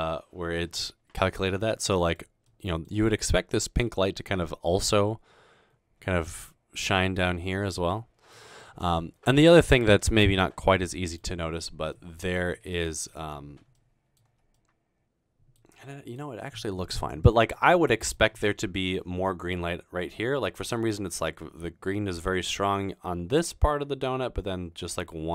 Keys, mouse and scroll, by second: 1.5-2.7 middle drag, 15.9-16.2 middle drag, 17.9 middle click, 20.3 middle click, 25.0-25.3 middle drag.